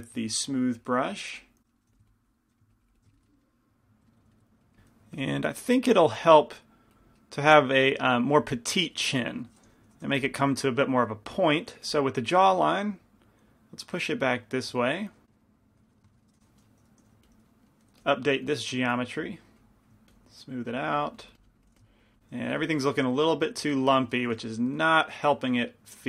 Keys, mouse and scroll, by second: 0.1 f, 0.9-1.9 drag, 2.0 f, 2.6-3.7 drag, 3.2-5.3 middle drag, 4.8 f, 5.1 click, 5.1 right click, 5.3 f, 5.3 i, 5.6-8.1 middle drag, 6.2 f, 6.7-7.7 drag, 6.7-7.7 right drag, 7.8 click, 7.8 right click, 9.1 click, 10.2 g, 12.0 f, 13.3-15.1 drag, 15.3 click, 17.2 i, 17.2 f, 18.2 f, 21.8 f, 22.7-24.0 drag, 22.7-24.0 right drag, 24.0 middle click, 24.3 scroll down 1, 24.5 f, 25.7 shift+f.